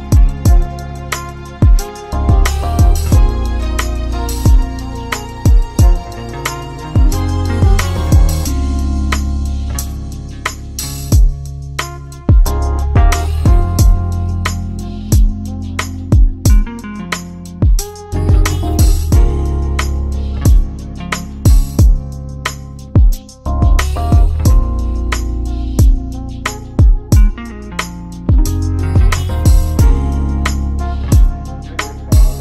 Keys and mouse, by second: 0.0-1.2 drag, 1.2-3.6 middle drag, 3.6 click, 4.3-7.9 middle drag, 7.9-8.6 drag, 8.6-9.7 middle drag, 9.7 g, 14.6-18.5 middle drag, 18.5 g, 24.7 Tab, 26.3 click, 26.5 click, 29.0-31.1 drag, 31.7 shift+click.